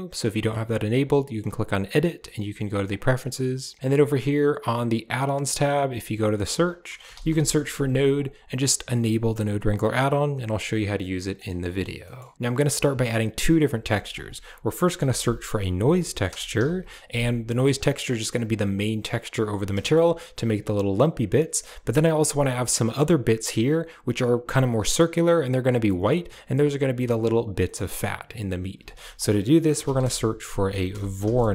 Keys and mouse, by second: 1.8-2.9 drag, 12.0 middle click, 12.8 middle click, 13.8 shift+a, 19.7 shift+middle click, 27.5 middle click, 28.6 shift+a.